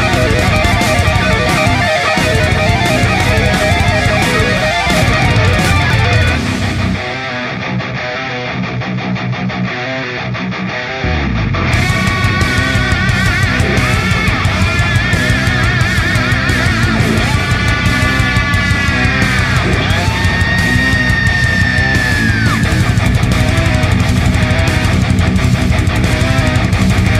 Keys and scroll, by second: 0.3 ctrl+space, 0.7 p, 1.2 space, 14.5 ctrl+alt+v, 15.5-16.2 typing, 18.7 a, 23.9 ctrl+j, 24.8 ctrl+j.